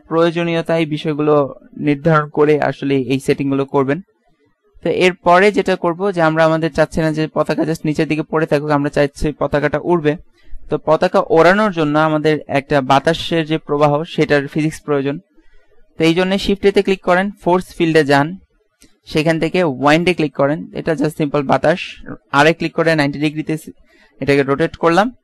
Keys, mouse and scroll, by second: 5.3 Escape, 6.3-8.8 middle drag, 7.6 KP_1, 16.6 shift+a, 22.8 r.